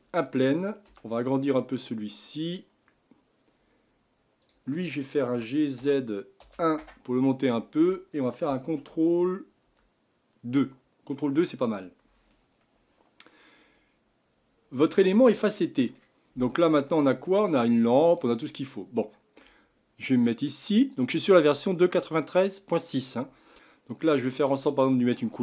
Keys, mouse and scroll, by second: 0.9 s, 4.4 click, 5.3 g, 9.6 ctrl+2, 11.1 scroll up 5, 15.0-16.2 middle drag, 16.2-17.5 scroll down 5, 17.5 click, 18.7-20.9 middle drag, 20.9 click, 23.5-24.4 middle drag, 24.4 click.